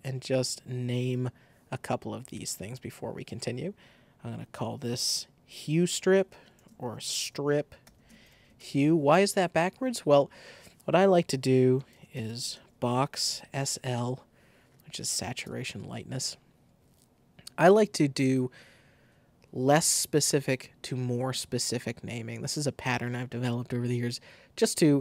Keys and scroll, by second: 5.4-9.1 typing, 6.5 shift+super+a, 11.6-13.8 typing, 15.4 Return.